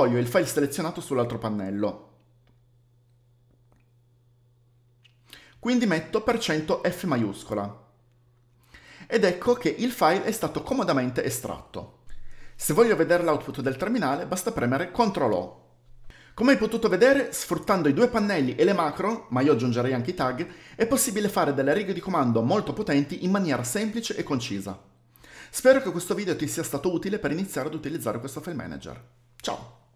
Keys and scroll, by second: 1.1 alt+shift+2, 2.2 Page_Down, 2.4 Page_Down, 5.8 alt+1, 7.1-7.4 typing, 14.6 ctrl+o.